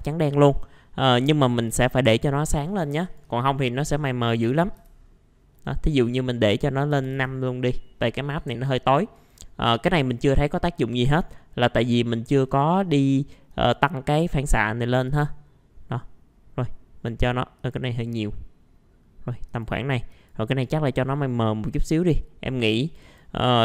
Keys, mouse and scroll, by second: 0.0 click, 3.2 click, 4.5 KP_4, 6.9 KP_5, 9.1-11.0 drag, 11.0-23.6 drag.